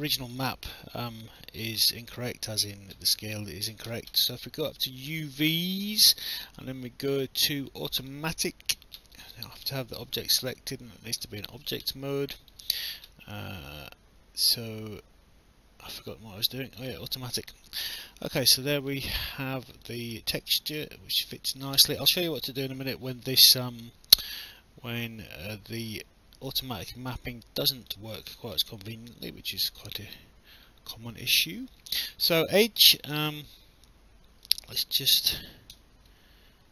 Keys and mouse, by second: 0.5 alt+click, 5.0 click, 8.0 click, 9.1 click, 10.4 right click, 12.4 click, 16.7 click, 18.7 alt+click, 19.8 alt+click, 23.8 alt+click, 25.9 alt+click, 27.4 alt+click, 29.5 right click, 34.4 click, 35.7 w.